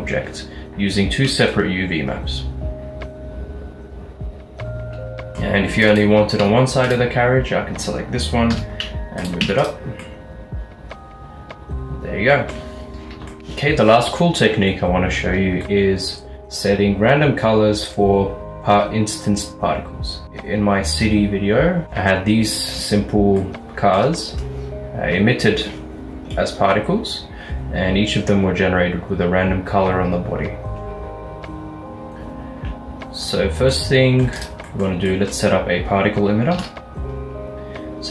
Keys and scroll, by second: 6.5 Tab, 8.6 g, 9.5 Tab, 13.4 ctrl+alt+shift+F11, 36.6 a.